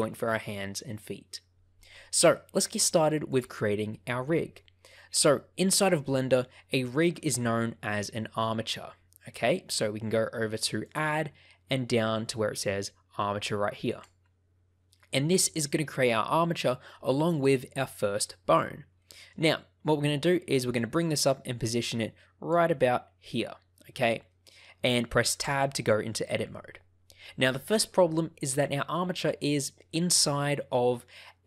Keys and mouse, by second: 6.2 shift+middle click, 10.9-14.0 drag, 17.2 shift+middle click, 18.9 shift+middle click, 20.7-22.5 drag, 24.2 shift+middle click, 25.4 Tab.